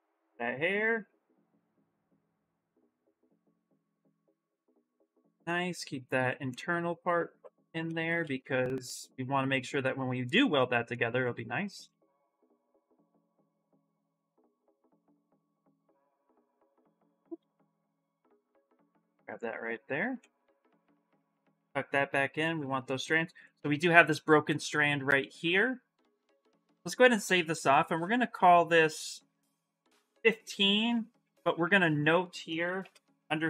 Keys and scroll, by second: 3.2 shift+f, 3.5 shift+f, 7.7 shift+f, 8.0 shift+f, 11.7 shift+f, 12.0 shift+f, 15.9 shift+f, 17.5 ctrl+z, 29.3 BackSpace, 29.9 5, 32.6 shift+-.